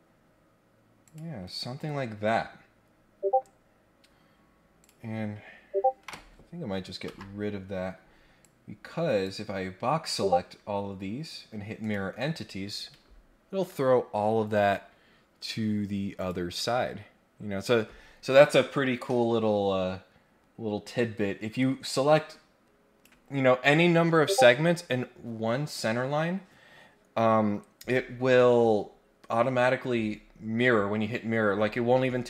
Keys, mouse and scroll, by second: 1.0 click, 1.4 Escape, 1.7 Escape, 2.3-2.9 scroll down 4, 3.2 scroll up 2, 4.8 click, 7.0 Delete, 8.4 click, 11.8 click, 16.1 click, 21.6-23.0 drag.